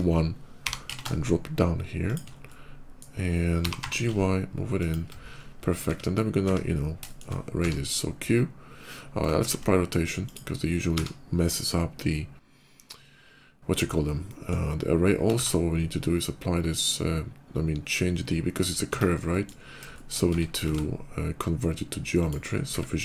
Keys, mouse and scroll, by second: 0.4 g, 0.7 z, 1.9 shift+click, 2.3 shift+middle click, 3.4 g, 3.6 y, 4.6 shift+click, 4.9-5.3 scroll down 2, 6.9 shift+middle click, 7.4 q, 9.2 ctrl+a, 10.0 click, 10.6 q, 14.1 middle click, 15.2 ctrl+a, 18.8 Tab, 19.1 middle click, 19.5 middle click, 19.7 shift+middle click, 20.0 Tab, 20.6 ctrl+a, 22.0 click.